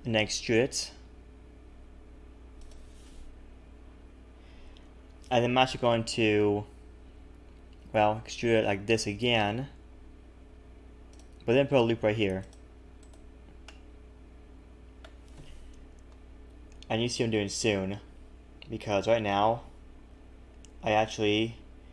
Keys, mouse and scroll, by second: 0.8-1.4 scroll up 1, 0.8 e, 8.3 e, 11.9 ctrl+r, 13.6 middle click.